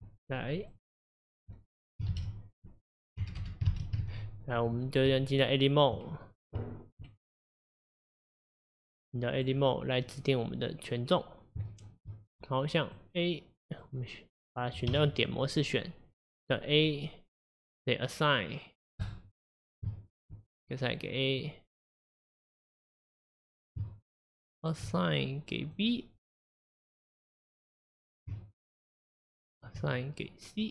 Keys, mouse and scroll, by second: 0.8-5.1 drag, 5.1 BackSpace, 9.5 click, 11.7 shift+middle click, 12.3-13.8 scroll up 2, 13.8 click, 14.9 1, 19.1 click, 19.9-22.3 shift+middle drag, 22.3 click, 25.7 click, 26.3 click, 28.9 shift+click, 29.6 shift+click, 30.6 click.